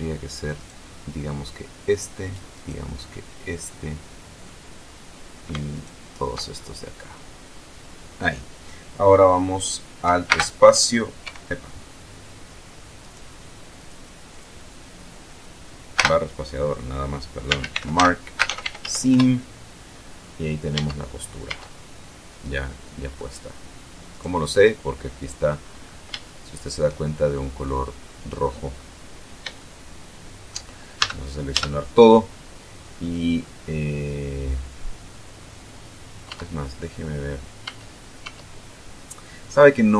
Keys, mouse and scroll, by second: 0.7 shift+right click, 2.7 shift+right click, 3.3-4.8 shift+middle drag, 4.8-5.7 shift+scroll up 1, 5.9 alt+shift+right click, 6.7-7.5 alt+shift+scroll down 4, 10.5 alt+space, 11.5 Escape, 13.2 right click, 14.0 click, 14.5 click, 16.2 space, 17.4-19.5 typing, 20.9 Tab, 21.6 Tab, 22.2-23.5 middle drag, 24.3 right click, 26.4 shift+middle click, 27.1-28.4 shift+scroll up 1, 28.6-29.4 scroll down 1, 29.4 scroll down 1, 29.8-30.8 shift+middle drag, 31.2 a, 36.4 Tab, 37.8 Tab, 39.7-39.9 middle drag.